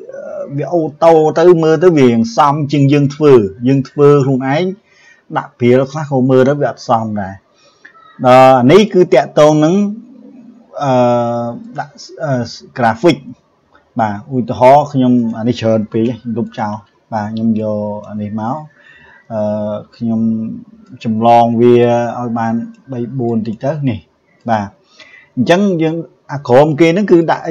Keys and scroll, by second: 15.9 Delete.